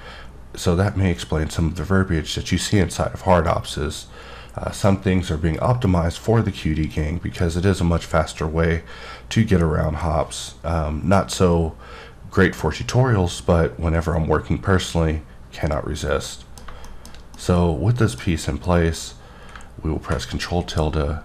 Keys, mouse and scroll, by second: 18.7 middle click.